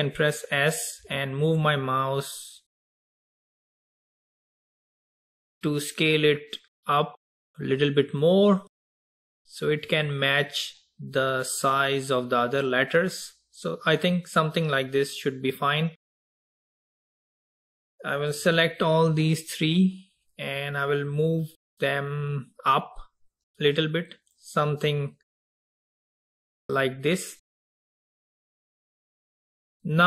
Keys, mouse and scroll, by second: 1.1 s, 9.8 click, 17.6 click, 18.0 click, 21.4 click, 25.7 click, 28.7 click.